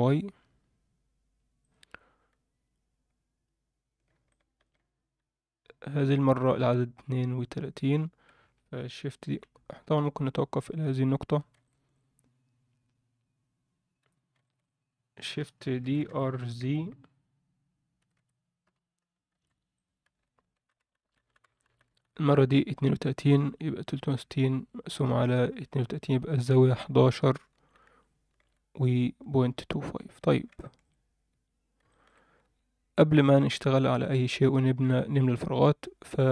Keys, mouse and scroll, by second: 4.3 alt+shift+middle click, 9.4-10.2 scroll down 5, 10.1-10.8 scroll up 2, 10.8 Tab, 11.6-11.9 shift+middle drag, 12.7 scroll up 1, 13.9 scroll up 1, 14.0 Tab, 14.4 shift+middle click, 14.7-15.1 scroll up 2, 15.8 shift+d, 20.6 shift+r, 20.8 shift+r, 21.0 shift+r, 21.2-28.4 shift+r, 29.0-30.2 scroll down 3, 29.2 Tab, 30.2 Tab, 30.2 scroll down 1, 30.6 shift+middle click, 31.0 scroll up 1, 31.3 Tab, 31.9 alt+shift+middle drag, 32.2 scroll up 1, 32.4 Tab, 33.8 click, 36.2-36.3 drag.